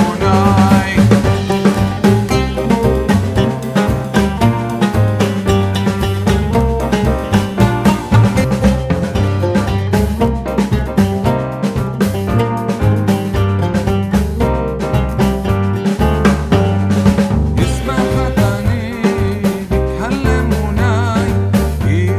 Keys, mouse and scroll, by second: 5.5 click, 6.5-13.6 alt+drag, 14.7 shift+Left, 16.1 Left, 18.2 click, 19.0 alt+scroll down 1, 20.7 right click, 21.4-22.1 drag.